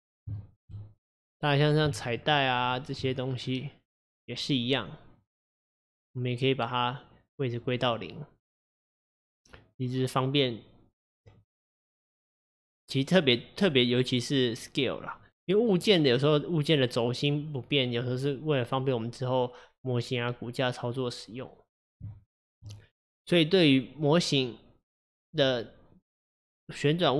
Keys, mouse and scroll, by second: 0.4-1.2 shift+middle drag, 1.2 click, 2.1 shift+click, 2.7 shift+click, 7.9 click, 11.3 click, 12.0 click, 15.8 click, 22.2-24.9 shift+middle drag, 24.9 click, 25.4 click.